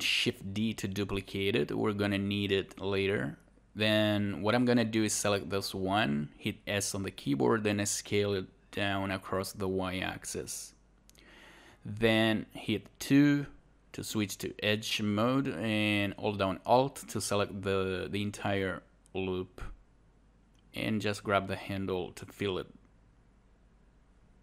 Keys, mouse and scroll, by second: 4.4 scroll up 1, 4.8 click, 6.8 click, 7.7 alt+click, 9.6 click, 10.2 alt+click, 11.2 click, 11.6 alt+click, 16.1 alt+right click, 16.5 alt+click, 23.4 alt+right click.